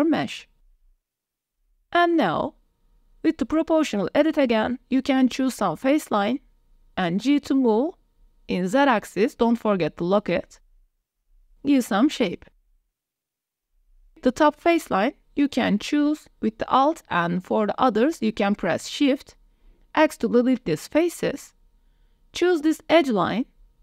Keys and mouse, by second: 1.5 click, 1.9 Tab, 2.1 click, 2.4 Tab, 2.7 click, 3.9 alt+click, 5.3 click, 5.8 click, 6.8 g, 11.0 z, 12.6 click, 12.8 middle click, 13.3 click, 15.4 click, 15.8 alt+click, 16.8 shift+click, 17.7 shift+click, 18.9 click, 20.3 x, 22.3 click, 23.4 click.